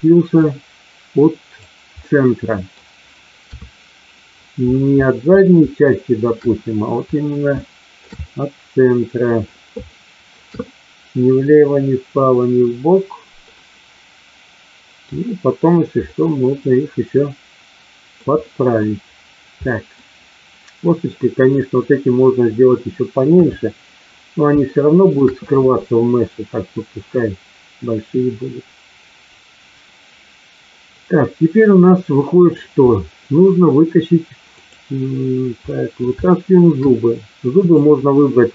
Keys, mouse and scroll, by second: 0.4-1.6 drag, 2.0-2.7 middle drag, 3.5 KP_3, 5.9-6.2 shift+middle drag, 7.5-7.9 shift+middle drag, 8.2-9.5 middle drag, 9.9-10.4 shift+middle drag, 10.6-13.4 middle drag, 13.5-15.1 middle drag, 16.0-18.1 middle drag, 18.2 middle click, 19.7 middle click, 23.2 KP_3, 24.6-25.1 shift+middle drag, 31.9-32.6 middle drag, 34.5 click, 35.6 middle drag, 36.2-36.6 shift+middle drag, 37.6 click.